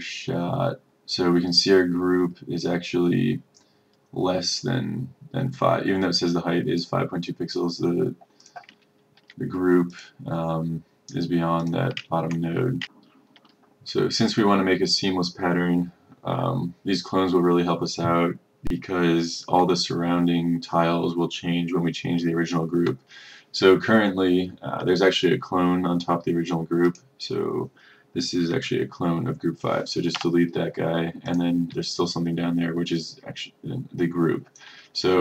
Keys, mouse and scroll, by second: 8.9-9.2 ctrl+scroll, 10.0 click, 12.1 ctrl+scroll, 13.0 click, 30.2 Delete, 31.4 click.